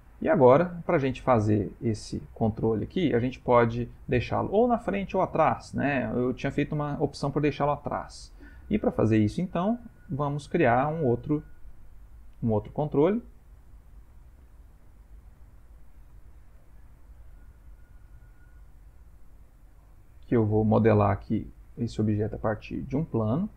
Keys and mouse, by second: 0.6 middle click, 2.3 middle click, 4.3 middle click, 8.3 middle click, 9.6 ctrl+middle click, 10.3 shift+middle click, 10.7 middle click, 11.8 shift+middle click, 12.6 shift+middle click, 14.2 shift+click, 15.6 shift+right click, 16.3 shift+a.